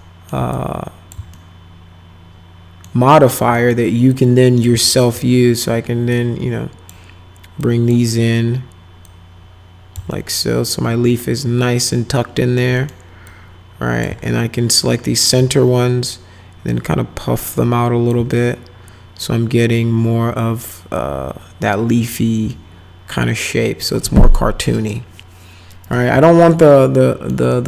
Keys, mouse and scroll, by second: 0.5 click, 1.3-2.8 alt+middle drag, 3.1 alt+middle click, 3.5 middle click, 4.1 click, 4.9 alt+middle click, 6.1 click, 7.6 click, 9.0 click, 10.1-12.6 alt+middle drag, 12.7 middle click, 13.3 click, 14.2-15.3 alt+middle drag, 16.7-18.1 drag, 18.3-22.0 alt+middle drag, 22.5-23.8 alt+middle drag, 24.0 middle click, 26.2-27.3 alt+middle drag, 27.5 alt+right click.